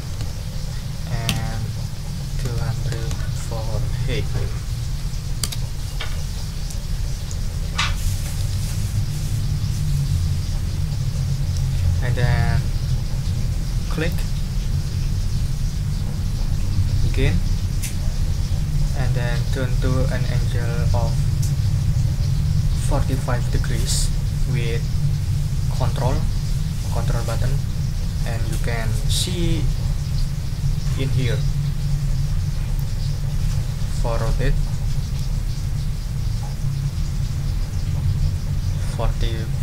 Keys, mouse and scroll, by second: 0.0 ctrl+0, 1.3 Tab, 2.4 2, 2.9 0, 5.4 Return, 14.1 scroll up 2, 32.7-39.6 ctrl+drag.